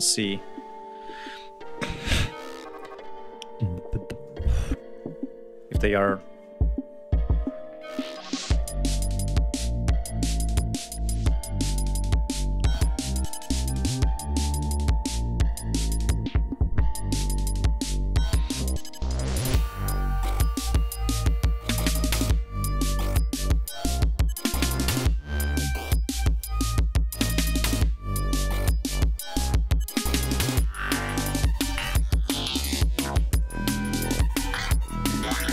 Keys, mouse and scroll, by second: 3.2 ctrl+scroll down 2, 3.8 ctrl+scroll down 2, 5.2 scroll up 2, 5.9 scroll down 2, 21.7 ctrl+scroll up 2, 22.5-22.9 scroll up 2, 23.5 scroll down 2, 24.1-24.5 scroll down 2, 25.7 ctrl+scroll up 2, 27.0-27.9 scroll up 4, 28.3 scroll up 2, 29.5 scroll up 2, 31.3 ctrl+scroll down 2, 31.7 ctrl+scroll up 2.